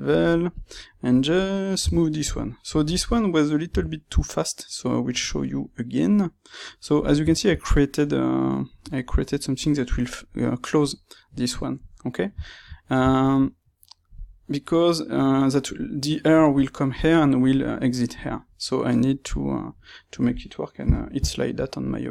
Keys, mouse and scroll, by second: 0.5 click, 0.7-22.1 middle drag, 1.7 g, 2.2 click, 3.6 g, 5.1 click.